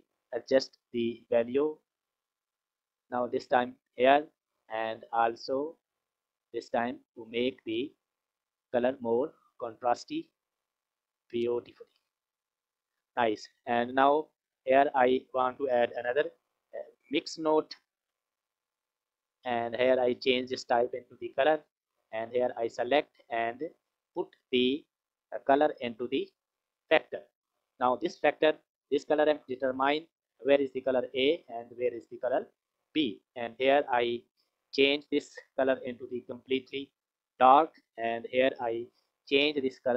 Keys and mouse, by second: 0.7-3.4 drag, 4.7-10.6 drag, 11.3 click, 12.2 click, 13.4 click, 14.5 click, 15.1 click, 16.1 shift+a, 20.0-20.9 drag, 21.4-22.7 drag, 24.3 click, 24.6-27.4 drag, 32.2 click, 34.1 click, 38.7 click.